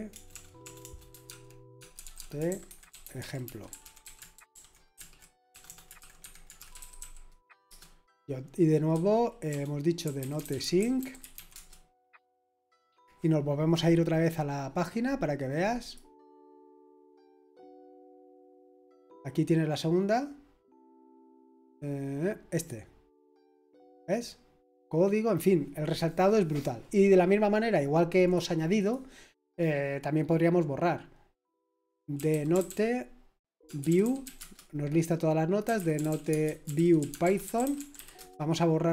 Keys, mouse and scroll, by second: 0.0-12.0 typing, 15.8 click, 17.8 click, 22.6 click, 28.2 click, 28.8 click, 31.9-38.4 typing.